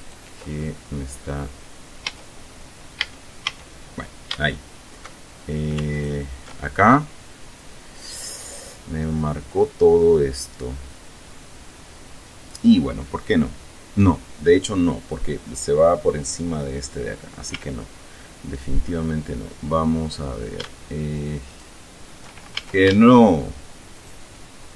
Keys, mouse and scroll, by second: 0.2 ctrl+right click, 0.8-1.2 ctrl+scroll down 2, 1.4-1.9 scroll up 2, 3.2 a, 6.2 alt+shift+right click, 6.5-7.3 alt+shift+scroll down 3, 8.7 scroll up 2, 17.8 a, 19.5 scroll down 2, 21.7 alt+shift+right click, 22.8 alt+shift+a, 24.2 alt+shift+right click.